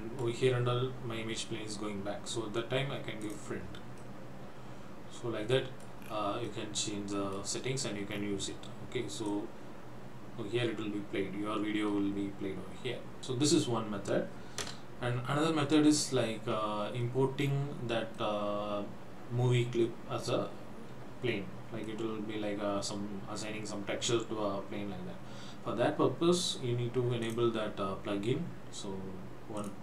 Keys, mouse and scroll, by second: 0.5-1.0 scroll up 3, 3.3 click, 4.1 middle click, 6.1 scroll down 3, 6.5 middle click, 7.7 scroll up 3, 8.1 scroll down 2, 9.3 click, 14.7 KP_0, 17.5 scroll down 4, 18.2 middle click, 21.9 middle click, 27.2 click.